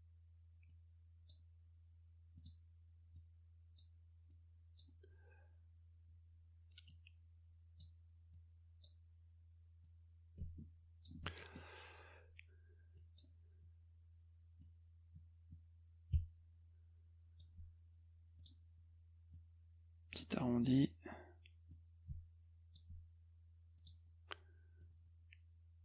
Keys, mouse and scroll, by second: 0.7 click, 2.4 click, 3.2 click, 4.3 click, 6.9 click, 8.3 click, 9.8-11.1 drag, 11.3 middle click, 13.0 click, 14.6-17.4 drag, 18.4 click, 19.3 click, 21.7-22.8 drag, 23.8 click, 24.8-25.8 drag.